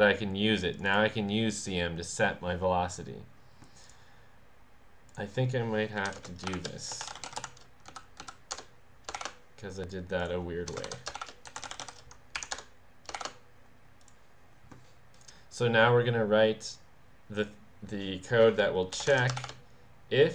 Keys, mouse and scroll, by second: 0.8 click, 3.8 click, 5.1 click, 6.0 Left, 6.2-7.9 typing, 8.2 Down, 8.6 Return, 9.2 shift+0, 10.2 click, 10.7-13.2 typing, 10.9 Left, 12.4 Up, 12.6 Return, 14.0 click, 15.2-19.0 drag, 18.7-20.3 typing.